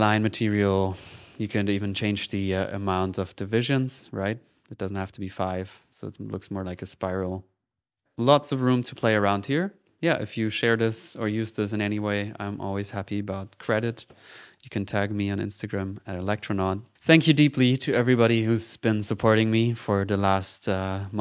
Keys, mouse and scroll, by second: 0.0 middle click, 0.3 click, 0.7 click, 1.1 click, 1.4 click, 2.0 click, 2.3 click, 3.0-4.5 drag, 5.2 click, 7.6 ctrl+z, 7.9 ctrl+click, 9.0 middle click, 9.8 click.